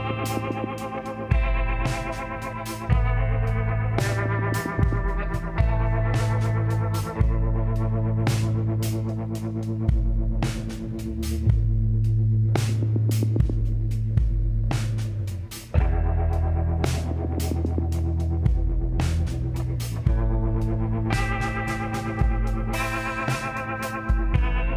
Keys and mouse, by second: 1.0 w, 4.0 middle click, 4.9-6.5 drag, 5.5 l, 6.5 middle click, 7.1 s, 10.4 middle click, 10.8 middle click, 12.9-14.7 drag, 13.8 x, 16.6-18.5 middle drag, 19.9-22.1 drag, 20.9 e, 22.9 s.